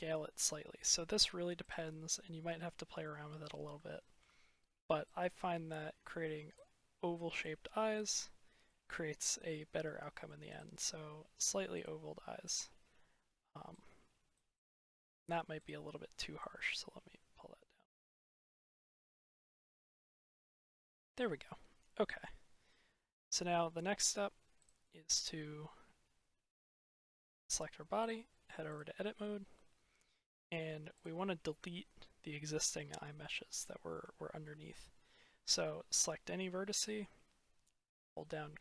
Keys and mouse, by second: 1.6 click, 2.5-2.9 drag, 3.4 middle click, 3.7-4.1 shift+middle drag, 5.0 click, 7.6-8.0 middle drag, 8.5-9.4 middle drag, 9.4-9.9 drag, 9.9 middle click, 10.3 click, 12.3 click, 13.7 click, 14.5-15.0 drag, 15.4 click, 16.2 click, 18.4 click, 18.8-20.0 middle drag, 20.5-20.9 drag, 22.0-23.1 drag, 24.5-26.2 drag, 26.9 click, 29.4-29.9 drag, 29.9 middle click, 32.1-33.4 drag, 33.9-34.3 shift+middle drag, 34.3 shift+click.